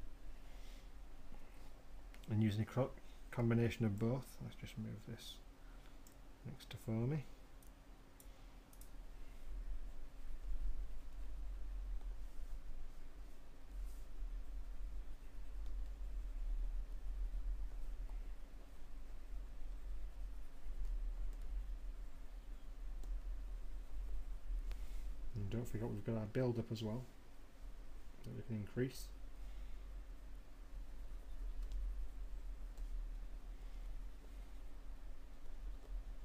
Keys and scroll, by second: 20.7 m.